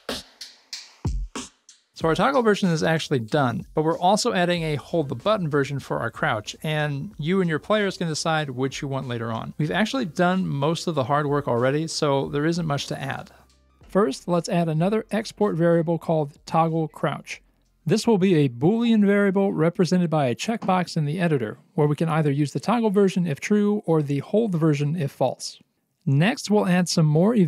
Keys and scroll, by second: 13.9 Return, 14.4 ctrl+v, 15.5 ctrl+s, 18.7 alt+x.